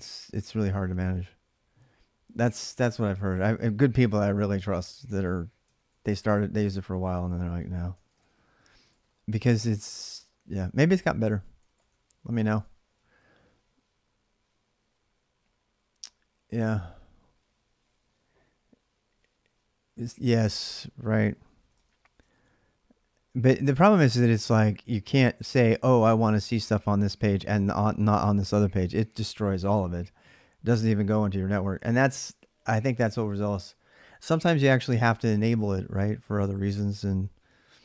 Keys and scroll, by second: 5.5 ctrl+a, 5.8 ctrl+a, 7.8 ctrl+[, 8.0-10.1 typing, 8.7 ctrl+[, 8.8 ctrl+j, 10.2 ctrl+a, 11.1-12.7 typing, 21.2-22.0 typing, 22.1 ctrl+a, 22.3-37.8 ctrl+a.